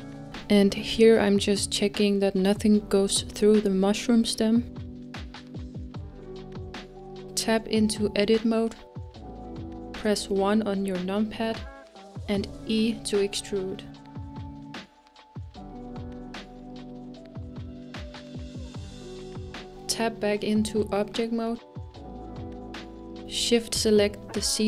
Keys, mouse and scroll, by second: 5.8-7.3 scroll up 3, 8.0 Tab, 11.2 KP_1, 13.5 e, 21.8-24.0 middle drag, 24.0-24.5 scroll down 1, 24.5-24.6 shift+middle drag.